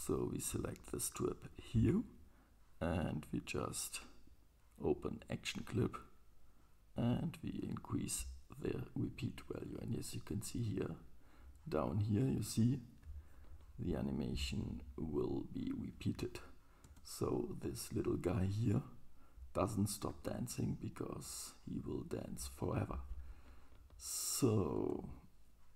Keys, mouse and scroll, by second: 0.0-7.5 right drag, 1.4 click, 4.9-7.5 drag, 16.9 space, 19.1-19.7 middle drag, 21.1 super+middle click, 21.4 middle click, 24.9 space.